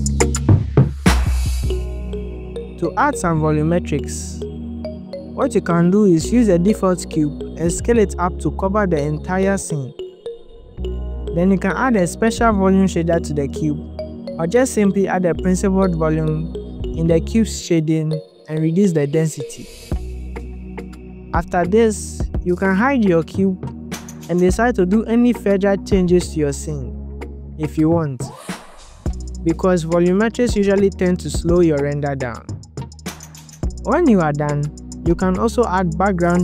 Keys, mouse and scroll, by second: 0.8 click, 1.2 scroll down 3, 1.8 KP_7, 2.2 click, 3.7 click, 6.1 click, 6.4 click, 6.6 scroll down 6, 6.7 s, 7.4 click, 7.7 click, 8.0 scroll up 2, 8.4 click, 8.9 click, 9.2 click, 9.3 KP_3, 9.5 click, 10.1 click, 11.6 click, 12.8 click, 21.5 click, 22.5 click, 23.0-23.5 scroll down 14, 23.5-23.8 drag, 24.0 click, 24.3-24.6 scroll up 4, 25.2 click, 25.2 scroll up 1, 25.4 click, 26.0 shift+click, 26.4 scroll down 1, 27.0 scroll down 1, 27.1 alt+click, 27.2 click, 27.4 click, 27.5 click, 27.6 click, 27.6 scroll down 1, 28.1 click, 28.3 shift+d, 28.7 ctrl+alt+z, 29.0 scroll down 2, 29.3 click, 29.6 click, 29.8 middle click, 29.8 scroll up 1, 29.9 g, 30.5 shift+middle click, 30.9 shift+click, 31.0 scroll up 2, 31.2 KP_7, 31.3 g, 32.1 click, 32.3 shift+click, 32.4 scroll up 1, 32.5 click, 32.7 shift+g, 32.9 click, 34.1 click, 34.2 scroll down 1, 34.3 click, 34.8 click, 35.2-35.5 scroll up 10, 35.5 scroll down 2, 35.7-36.1 scroll down 16, 36.0 click.